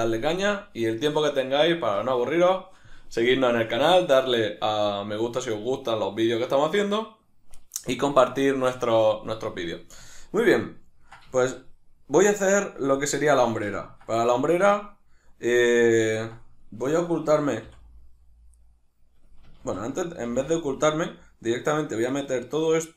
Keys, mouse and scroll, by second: 10.6-18.5 ctrl+middle drag, 17.6 h, 18.5 right click, 18.6-19.6 middle drag, 19.6 ctrl+z, 21.1 shift+right click, 21.6 shift+right click, 22.1 shift+right click.